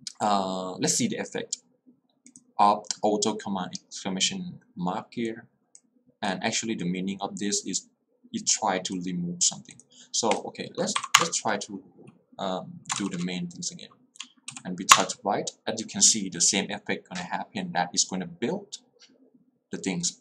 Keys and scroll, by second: 11.1 Up, 11.3 Return, 14.6 w, 15.0 Return.